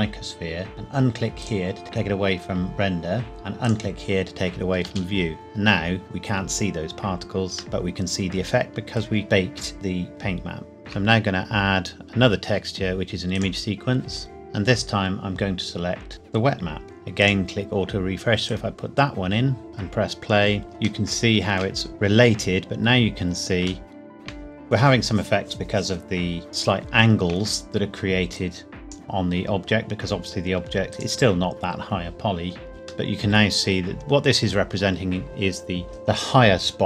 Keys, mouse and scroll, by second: 1.4 click, 3.6 click, 4.8 space, 6.0-7.6 scroll down 1, 7.6 middle click, 9.8 space, 10.8 shift+a, 13.3 click, 16.1 click, 16.8-17.2 scroll up 1, 17.2 click, 19.7 space, 20.6 scroll up 1, 21.0 shift+middle click, 22.9-23.6 scroll up 1, 23.8 shift+middle click, 24.5-26.4 scroll up 1, 26.5 middle click, 28.3 click, 30.0 Tab, 30.9 click, 32.7-33.1 scroll up 1, 33.1 middle click, 33.8 scroll down 1, 35.7 scroll down 1.